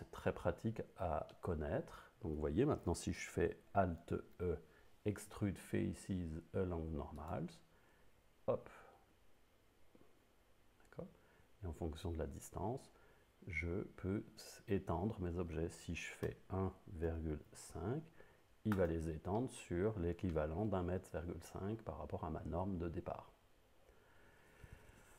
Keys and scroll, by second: 4.2 alt+e, 16.3 1, 17.5 5.